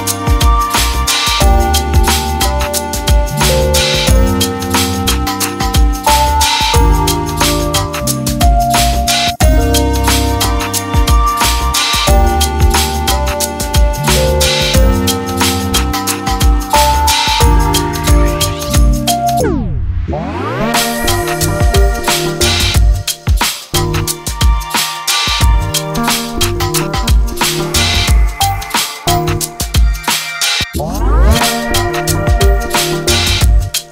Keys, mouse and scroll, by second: 4.4 g, 7.6 g, 9.5 ctrl+Left, 9.9 g, 16.8 ctrl+Left, 17.1 g, 19.1 ctrl+Left, 19.5 g, 21.6 ctrl+Left, 22.3 g, 23.6 ctrl+Left, 24.0 g, 25.0 shift+middle click, 25.7 ctrl+click, 26.1 g, 27.1 ctrl+click, 27.5 g, 29.2 ctrl+Left, 29.4 g, 30.5 ctrl+Left, 30.8 g, 31.9 ctrl+Left, 32.2 g.